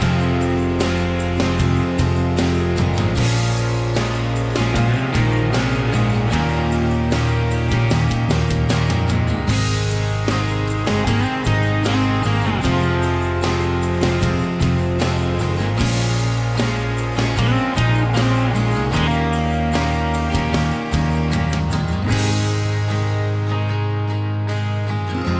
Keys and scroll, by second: 1.7 l, 2.8 e, 5.7 p, 6.5 1, 6.7 Return, 6.9 Escape, 8.3 ctrl+z, 10.7 ctrl+z, 11.2-12.9 typing, 17.5 Escape, 23.4 ctrl+z.